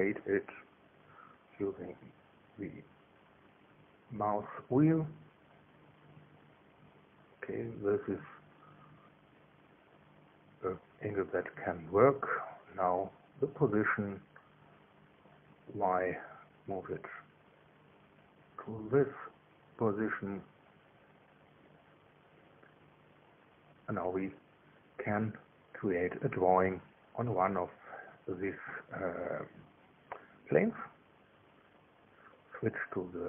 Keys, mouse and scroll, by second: 0.3 click, 1.1 click, 1.8-2.4 scroll up 1, 2.4-2.8 scroll up 1, 2.9-4.6 scroll up 1, 4.6-6.3 scroll up 1, 6.3-12.2 scroll down 1, 12.2 click, 13.9 click, 15.2 click, 15.7-17.3 scroll up 1, 17.3 scroll up 1, 19.2-22.9 drag, 21.9 KP_1, 22.3 KP_3, 27.2-28.2 middle drag, 28.9 click.